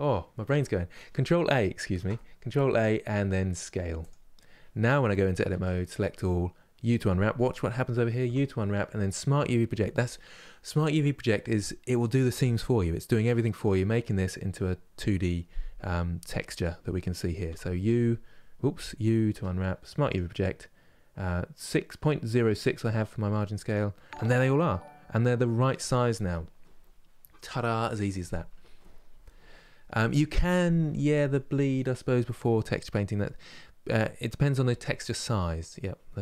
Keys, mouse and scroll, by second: 3.8 ctrl+a, 5.2 Tab, 17.2 u.